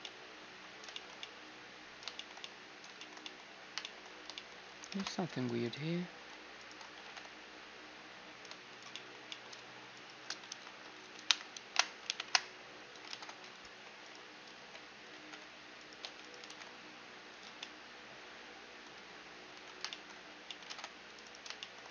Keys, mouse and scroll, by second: 4.6 ctrl+Tab, 5.3-8.3 right drag, 6.6 g, 8.6-10.9 middle drag, 9.6-11.7 right drag, 10.1 KP_1, 10.9 ctrl+KP_1, 11.3 KP_Decimal, 11.7 ctrl+KP_3, 11.9 KP_Decimal, 12.7 ctrl+Tab, 13.6-15.6 right drag, 14.2 z, 14.7 g, 15.6 a, 15.8-18.2 right drag, 16.0 g, 17.1 z, 17.2-20.9 middle drag, 19.1 a, 20.4 ctrl+Tab, 20.9-21.9 right drag.